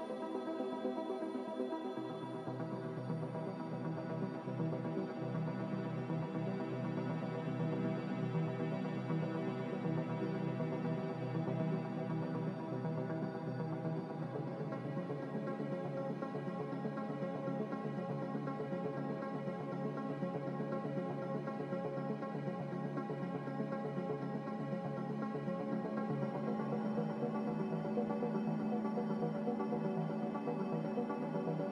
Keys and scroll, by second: 2.0 ctrl+z, 2.3 ctrl+z, 2.6 ctrl+z, 3.0 ctrl+z, 3.5 ctrl+z, 3.8 ctrl+z, 7.5 ctrl+z, 7.7 ctrl+z, 8.0 ctrl+z, 8.2 ctrl+z, 8.4 ctrl+z, 8.5 ctrl+z, 16.4 g, 21.9 Escape, 25.6 z, 29.5 a.